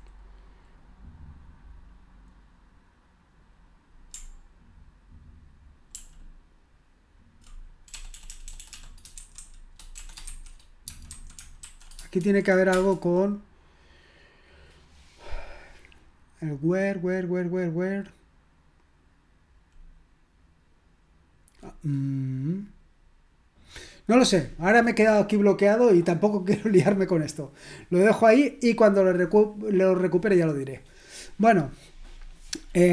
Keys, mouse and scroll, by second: 6.0 ctrl+p, 7.9-12.8 typing, 32.5 click.